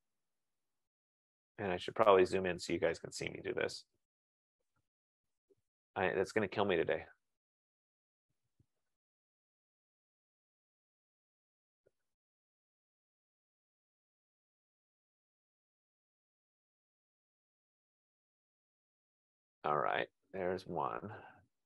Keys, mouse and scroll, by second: 0.5 click, 1.9 click, 3.7 F15, 3.9 super+=, 4.1 super+=, 6.6 super+-, 7.2 super+-, 13.8 ctrl+=, 14.0 ctrl+=, 14.4 ctrl+=, 14.7 ctrl+=, 15.3 ctrl+=, 17.7 click, 19.0 click, 21.3 click.